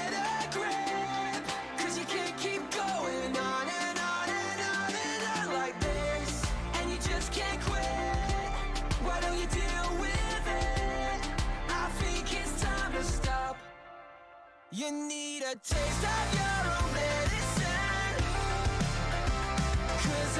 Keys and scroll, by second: 0.7-1.6 typing, 8.8 ctrl+c, 9.0 ctrl+v.